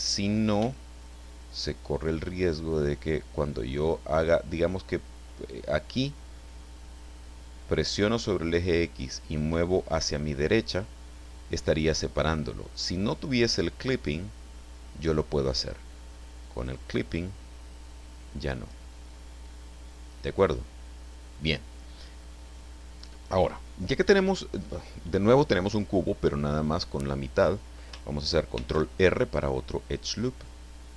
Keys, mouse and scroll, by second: 0.6 b, 1.1 click, 2.7-4.4 drag, 8.2-12.0 drag, 12.7 click, 14.0-15.8 drag, 16.6 click, 17.8 click, 19.4 click, 28.6 ctrl+r, 29.4 click.